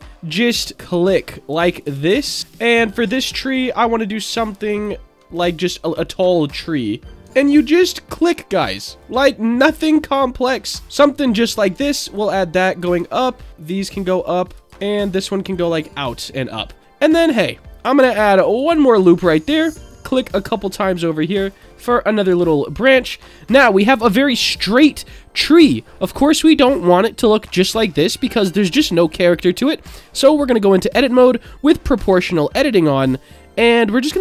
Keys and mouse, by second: 0.8 shift+middle click, 1.8 ctrl+right click, 2.4 ctrl+right click, 3.5 ctrl+right click, 4.2 click, 4.7 ctrl+right click, 6.5 ctrl+right click, 7.7 ctrl+right click, 9.0 click, 10.1 ctrl+middle click, 11.5 click, 12.0 ctrl+right click, 12.8 click, 14.4 ctrl+click, 14.6 click, 15.5 ctrl+right click, 17.0 click, 18.1 ctrl+r, 19.5 right click, 21.5 ctrl+right click, 22.3 Tab, 22.8-24.9 middle drag, 27.1-29.6 middle drag, 29.8 Tab, 31.1 click, 32.0 g.